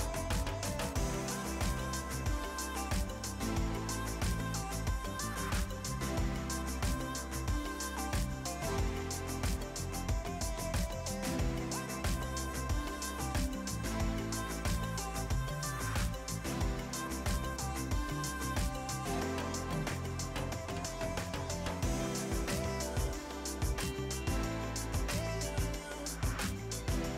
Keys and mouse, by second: 0.3 right click, 1.4 click, 2.8-6.6 typing, 3.0 ctrl+click, 4.4 Return, 4.7 click, 5.7 Return, 5.9 click, 6.4 ctrl+click, 6.8 Return, 7.1 click, 10.2 ctrl+click, 10.5 KP_1, 10.7 Return, 10.8 ctrl+1, 11.8 Delete, 12.0 click, 12.2 ctrl+x, 12.5 click, 16.0 click, 16.5 right click, 16.8 click, 17.0-18.2 typing, 18.6 click, 23.5 KP_8, 23.9 click.